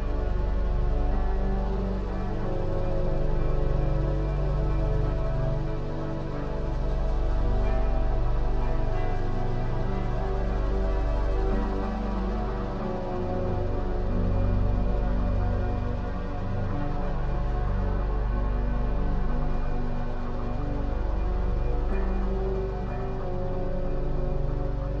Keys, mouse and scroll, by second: 0.2-2.8 middle drag, 2.8-5.8 drag, 7.2 click, 8.6-13.9 drag, 14.2-16.2 scroll down 6, 16.2 click, 16.7-19.7 middle drag, 21.3-22.3 scroll down 3, 22.9-25.0 shift+middle drag, 24.6-25.0 scroll up 2.